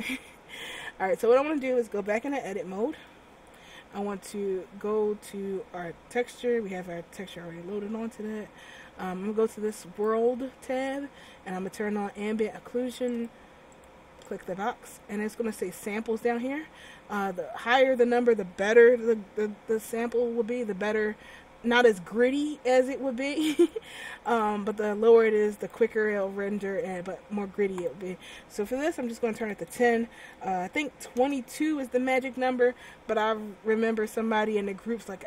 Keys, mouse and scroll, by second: 2.6 Tab, 9.9 click, 13.2 click, 13.8 click, 14.4 click, 15.2-17.4 scroll down 5, 23.8 click, 27.9 click.